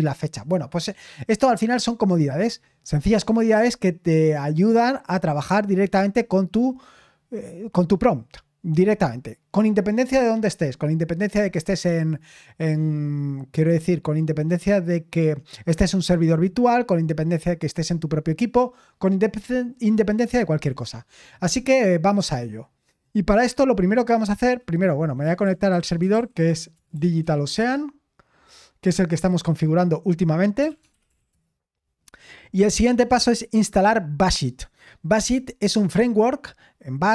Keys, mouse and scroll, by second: 25.0-28.4 typing, 30.3-31.7 typing, 33.2 click, 36.8-37.1 scroll down 4.